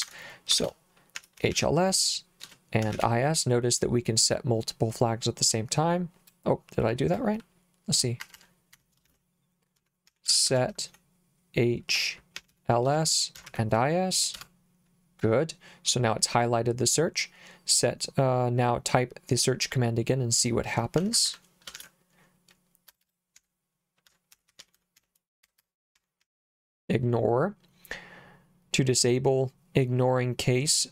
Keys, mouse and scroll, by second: 0.0 Escape, 0.6-3.5 typing, 6.3 BackSpace, 8.3 Escape, 8.8 Escape, 9.1-14.0 typing, 14.4 Return, 21.0 Escape, 21.2 Escape, 21.8 shift+;, 22.9-26.7 typing.